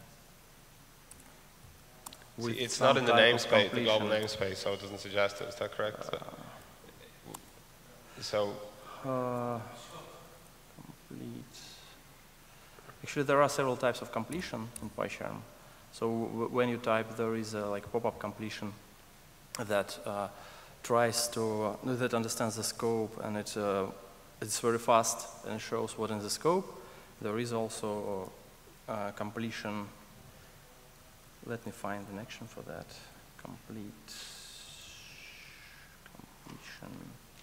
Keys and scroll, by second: 0.7 alt+BackSpace, 2.4 ctrl+alt+space, 3.4 Escape, 4.2 ctrl+space, 9.2 ctrl+shift+super+a, 27.9 Escape, 31.5 ctrl+shift+super+a.